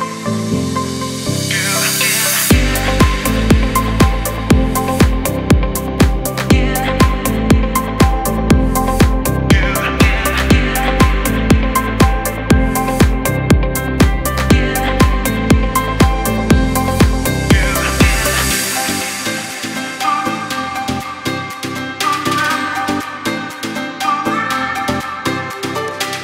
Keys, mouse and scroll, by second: 5.4-8.0 shift+drag, 8.8 space, 8.9 click, 9.3 space, 9.7-15.3 drag, 15.3 ctrl+c, 16.7 click, 18.4-19.9 alt+drag, 19.6 t, 20.5 ctrl+a, 20.9 ctrl+v, 22.2 click, 23.0 click.